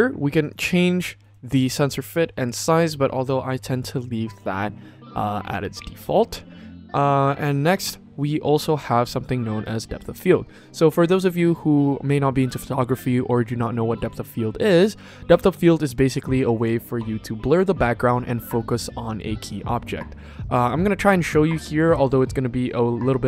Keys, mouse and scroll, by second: 0.3 click, 5.3 click, 14.6 click.